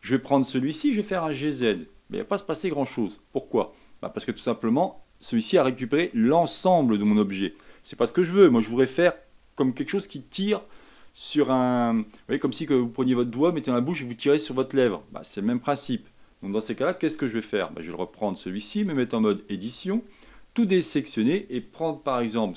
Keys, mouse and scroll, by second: 0.1 click, 1.0 g, 16.8-17.9 middle drag, 17.9 click, 18.8 Tab, 19.1-20.2 scroll up 4, 20.2 a, 20.7-22.4 middle drag, 22.4 c.